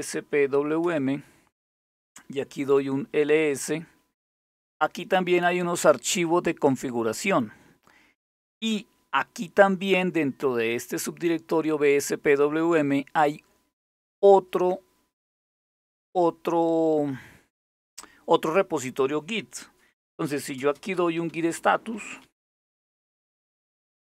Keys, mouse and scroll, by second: 0.5 Return, 2.1-2.8 typing, 3.0 Return, 19.5-22.3 typing.